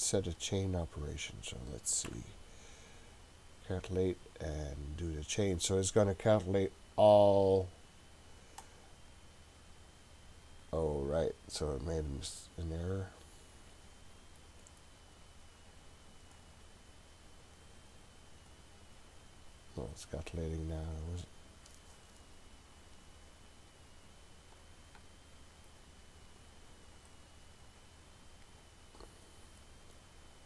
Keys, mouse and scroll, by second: 0.3 click, 1.2 click, 2.1 Delete, 8.6-10.1 drag, 14.7 click, 16.4 click, 18.5-29.9 drag.